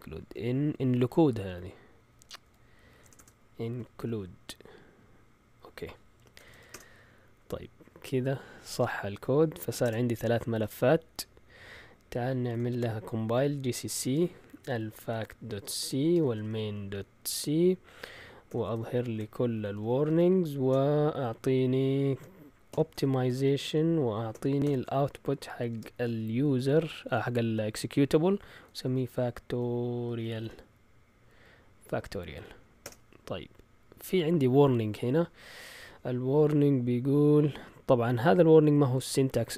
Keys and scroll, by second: 0.3 Up, 0.9 Right, 1.1 Right, 1.3 Right, 1.4 Right, 2.1 Left, 2.4-4.2 typing, 6.1 Escape, 6.2-6.9 typing, 9.3-10.2 typing, 12.7 ctrl+l, 13.1-20.7 typing, 22.7-24.6 typing, 25.7 typing, 28.4-31.0 typing, 32.8 Return.